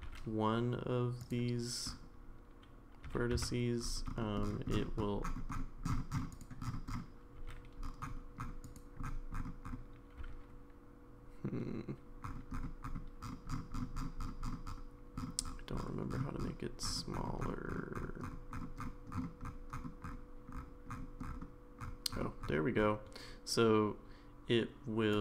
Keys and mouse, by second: 0.0 g, 7.4 g, 10.2 g.